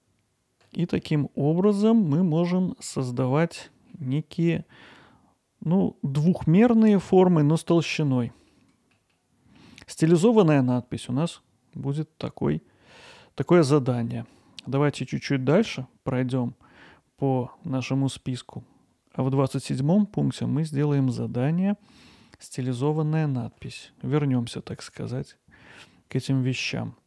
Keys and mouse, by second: 1.0 alt+middle click, 1.5 alt+middle click, 3.4 middle click, 3.9-8.9 alt+middle drag, 9.1 alt+middle click, 10.4 middle click, 11.0 middle click, 14.1 alt+middle click, 22.2 middle click, 23.1 ctrl+alt+middle click, 26.0 middle click.